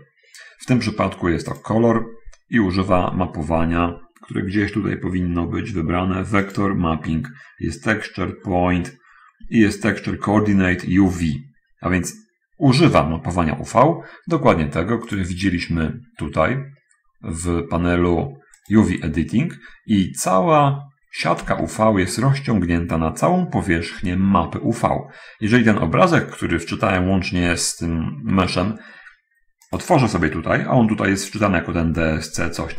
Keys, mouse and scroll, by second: 6.5 click, 7.5-7.9 scroll down 1, 8.8 scroll down 1, 19.0 click, 21.6 a, 28.3-30.1 scroll up 2, 30.1 click.